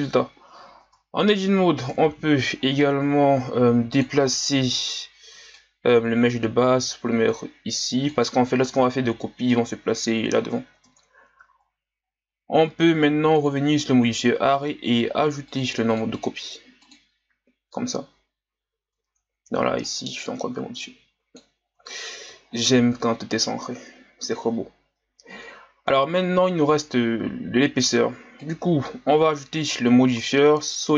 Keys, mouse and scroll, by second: 0.8 Tab, 1.9 KP_1, 2.7-3.2 scroll down 2, 3.9 click, 4.3-5.6 scroll up 1, 5.6-10.7 drag, 10.7 Tab, 11.5-12.1 scroll down 1, 12.1-13.3 scroll up 1, 13.3-19.0 drag, 19.0 Tab, 19.9-21.7 drag, 21.7 Tab, 22.5-23.4 scroll down 5, 23.4-26.5 middle drag, 28.4-29.6 drag.